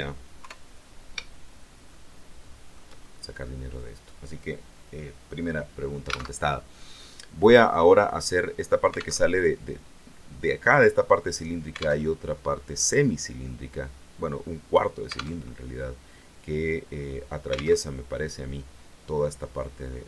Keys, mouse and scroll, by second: 0.3 KP_3, 1.8-2.8 shift+middle drag, 2.9 shift+scroll up 2, 6.2 alt+Tab, 9.0 alt+Tab, 12.0 alt+Tab, 15.3 alt+Tab, 16.0 scroll down 2, 17.7 alt+Tab.